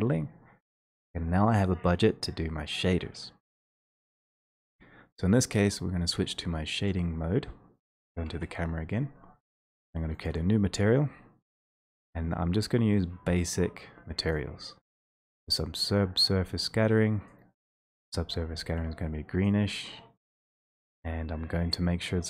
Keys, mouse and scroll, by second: 4.8-8.2 drag, 10.3 click, 14.8 click, 14.8-15.2 scroll, 17.3 click, 18.1 click, 19.5 click, 20.5 click.